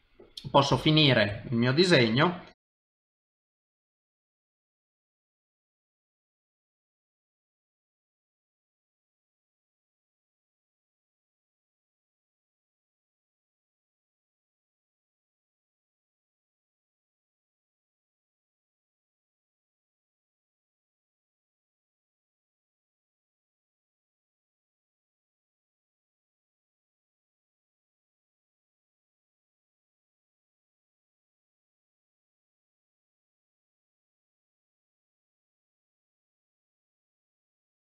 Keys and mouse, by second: 0.7 KP_7, 1.4 shift+middle click, 2.5 ctrl+Tab, 3.6 click, 4.1 middle click, 4.9 middle click, 5.4 KP_7, 5.9 click, 6.4 middle click, 7.1 KP_7, 7.5 click, 7.9 middle click, 8.3 ctrl+z, 8.4 middle click, 8.7 KP_7, 9.0 click, 9.5 middle click, 9.8 shift+middle click, 9.9 middle click, 10.1 ctrl+Tab, 10.7 click, 10.8 middle click, 11.1 alt+a, 11.3 click, 11.3 middle click, 11.7 shift+d, 12.0 middle click, 12.5 shift+d, 12.9 middle click, 13.3 shift+d, 13.5 middle click, 14.4 middle click, 14.9 click, 15.7 middle click, 16.2 ctrl+Tab, 16.6 click, 16.8 middle click, 17.4 click, 17.6 middle click, 17.8 ctrl+z, 17.9 middle click, 18.3 click, 18.5 middle click, 20.5 click, 20.8 middle click, 21.3 Tab, 21.4 middle click, 21.7 click, 21.8 middle click, 22.2-23.7 typing, 24.1 middle click, 24.5 shift+middle click, 24.7 middle click, 24.9 shift+middle click, 25.4 click, 25.7 click, 26.0 click, 26.0 middle click, 26.2 KP_1, 26.4 KP_1, 27.1 ctrl+alt+KP_3, 27.5 ctrl+Tab, 27.6 KP_9, 28.0 click, 28.7 middle click, 29.3 ctrl+Tab, 29.8 click, 29.9 middle click, 30.2 shift+d, 30.7 middle click, 31.2 click, 31.2 middle click, 31.9 g, 32.4 middle click, 32.8 click, 32.9 middle click, 33.3 g, 34.1 middle click, 34.6 middle click, 34.7 shift+middle click, 34.7 middle click, 35.1 click, 35.2 middle click, 35.6-37.8 typing, 37.4 middle click.